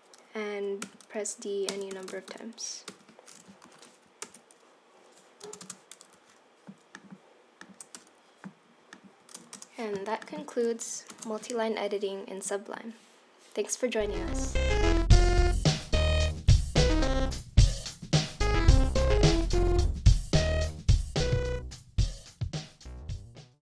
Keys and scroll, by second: 0.8 super+d, 1.7 super+d, 1.9 super+d, 2.1 super+d, 2.3 super+d, 3.7 Left, 4.3 Return, 5.5 space, 7.9 BackSpace, 9.4 BackSpace, 9.5 Return, 11.1 super+s.